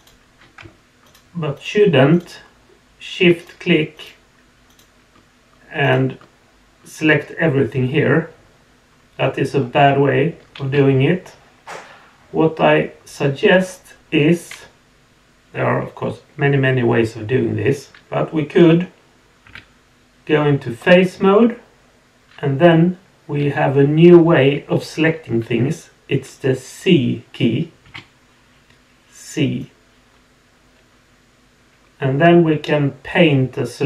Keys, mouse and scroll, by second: 1.0 shift+click, 1.5 shift+click, 2.1 shift+click, 3.4 shift+click, 3.9 shift+click, 4.7 shift+click, 5.8 shift+click, 8.9 scroll up 1, 9.5 scroll down 1, 10.6 alt+a, 11.7-13.4 middle drag.